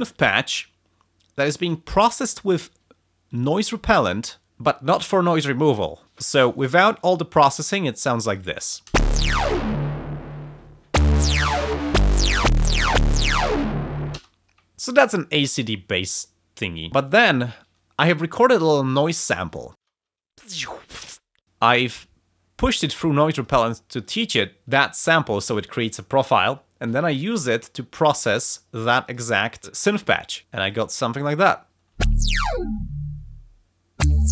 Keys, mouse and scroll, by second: 3.3 click, 6.1 click, 8.3 click, 8.9 space, 14.1 space, 18.0 click, 18.6 click, 19.5 click, 19.7 space, 21.5 click, 23.3 click, 23.9 click, 28.0 click, 29.0 click, 30.4 space, 30.6 click, 31.6 scroll down 2, 31.7 click, 31.7 space, 32.1 space.